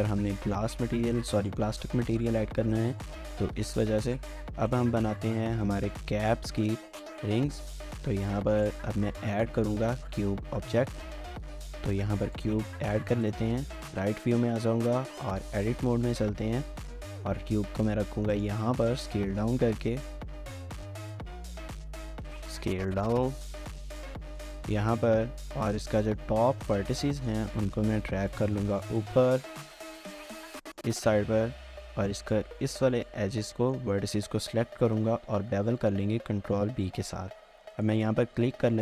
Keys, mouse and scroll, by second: 1.8 shift+middle click, 2.2 scroll down 1, 3.0 ctrl+s, 3.3 ctrl+s, 3.6 ctrl+s, 5.4 shift+middle click, 6.2-6.6 scroll up 2, 6.5 shift+middle click, 9.1 scroll down 1, 9.3 shift+middle click, 9.9 shift+middle click, 10.3 scroll down 1, 10.8-11.3 typing, 13.7 typing, 14.9 Tab, 15.4-16.5 typing, 17.1 shift+middle click, 17.4 scroll up 1, 17.6 s, 18.8 double click, 19.1 s, 19.8 shift+middle click, 20.1 scroll up 1, 20.7 g, 21.3 shift+middle click, 21.4-21.8 shift+scroll up 2, 21.8 s, 22.9 shift+middle click, 23.2 g, 24.6 shift+middle click, 25.2 typing, 26.8-27.7 typing, 26.9 scroll down 1, 27.1 shift+middle click, 28.6 shift+middle click, 28.9-29.7 typing, 31.0 scroll up 1, 31.2 scroll, 31.3 shift+middle click, 31.6-32.3 scroll up 1, 32.6 shift+middle click, 33.6 shift+middle click, 35.2 ctrl+b.